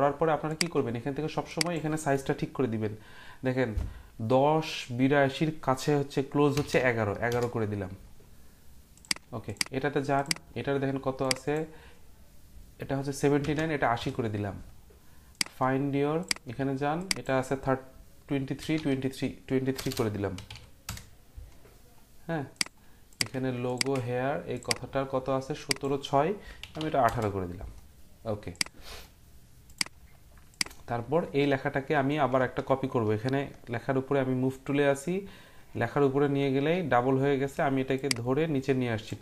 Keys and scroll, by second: 6.5 typing, 7.3 Return, 13.2-13.9 typing, 14.0 Return, 18.4-21.0 typing, 26.4-27.3 typing.